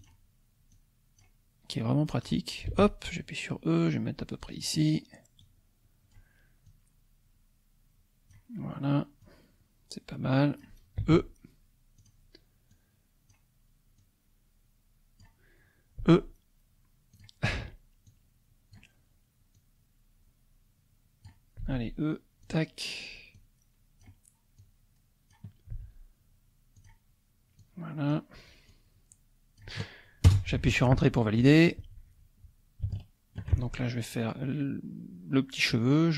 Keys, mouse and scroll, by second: 0.0 click, 0.7 click, 1.7 click, 2.7 e, 4.5 click, 5.5 click, 6.7-8.5 drag, 9.2-10.8 drag, 11.0 e, 12.0 click, 12.7-13.8 drag, 14.0-15.4 drag, 16.0 e, 17.2 click, 18.1 click, 19.6-21.6 drag, 21.6 e, 22.4 click, 23.4-24.5 drag, 24.7 click, 25.8 e, 26.8 click, 27.6 click, 28.7-30.0 drag, 30.3 Return, 32.9 shift+click.